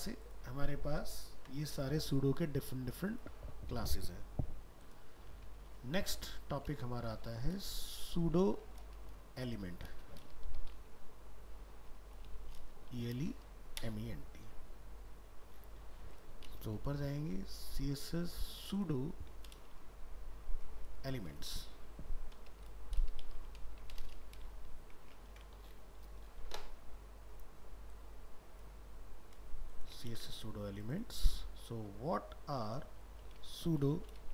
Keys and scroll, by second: 0.6 ctrl+s, 5.6 alt+f, 5.7 alt+移, 16.8 ctrl+Home, 24.5 ctrl+shift+Left, 25.3 ctrl+c, 30.1 ctrl+v.